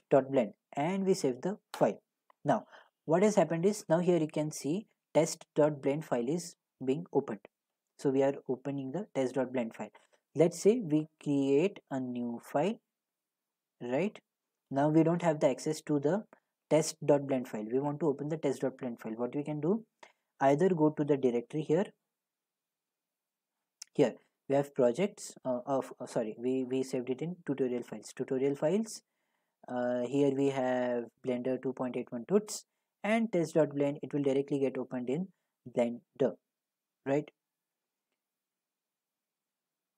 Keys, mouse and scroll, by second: 1.1 click, 1.9 click, 6.0 a, 9.0-10.2 middle drag, 10.2-16.0 drag, 16.0-20.9 middle drag, 21.5-25.2 drag, 25.4 drag, 28.6 click, 29.5-30.4 drag, 31.9 click, 33.1 click, 33.2 click.